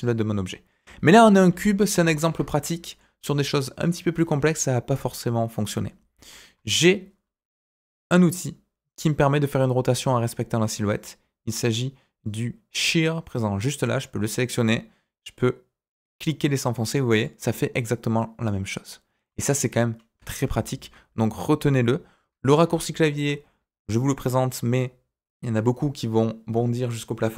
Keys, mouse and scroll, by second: 1.0 ctrl+z, 1.4 ctrl+z, 1.9 ctrl+z, 2.6 middle click, 3.4 alt+click, 3.8-5.5 middle drag, 6.5 KP_1, 13.7 click, 14.7-17.2 drag, 17.5-19.6 middle drag, 19.6 typing, 20.4 ctrl+z, 21.6 click, 22.9 KP_1.